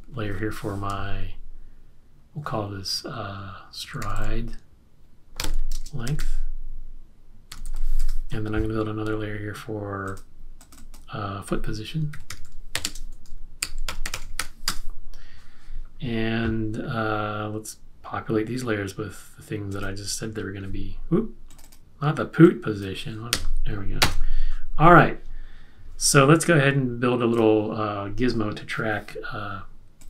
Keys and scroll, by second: 3.6-8.2 typing, 11.9-15.1 typing, 23.3 f.